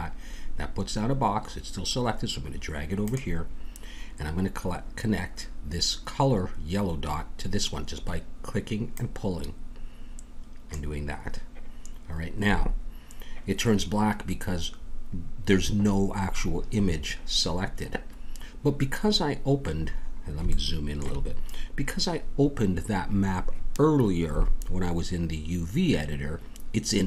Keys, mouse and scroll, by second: 8.9-10.9 drag, 19.7-21.2 middle drag.